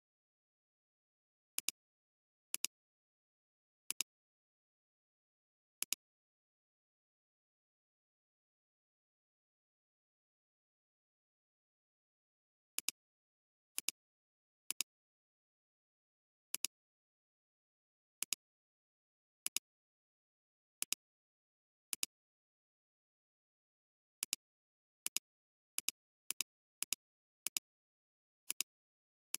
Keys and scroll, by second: 21.9 alt+space, 22.9 [, 28.5 space.